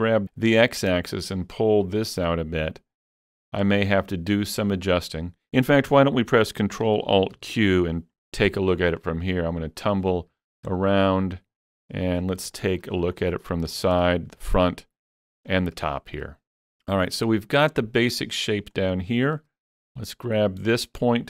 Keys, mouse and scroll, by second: 0.0-5.5 drag, 6.5-10.1 drag, 6.5 g, 7.4 ctrl+alt+q, 9.0-10.4 middle drag, 10.1 scroll up 1, 10.8-12.3 shift+middle drag, 12.2 scroll up 4, 12.6 shift+middle click, 12.9-13.7 scroll up 1, 13.8 scroll up 4, 14.2 shift+middle click, 15.1-15.8 scroll up 3, 15.9 shift+middle click, 18.9 shift+middle click, 18.9 scroll up 1, 19.1 shift+middle click, 20.0 click.